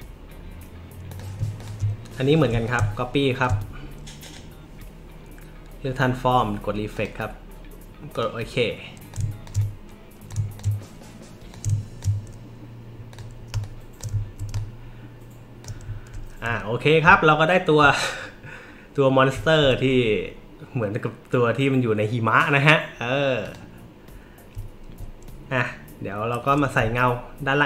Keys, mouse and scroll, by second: 1.1 click, 1.6 shift+click, 2.6 alt+shift+click, 4.2 right click, 6.9 click, 8.1 click, 9.1 click, 10.3 click, 11.5 shift+click, 13.1 click, 13.5 space, 13.6 click, 14.2 alt+scroll up 1, 14.5 space, 14.5-15.6 drag, 23.4 click, 24.7 alt+middle click, 24.7 alt+scroll, 26.5-27.6 alt+drag.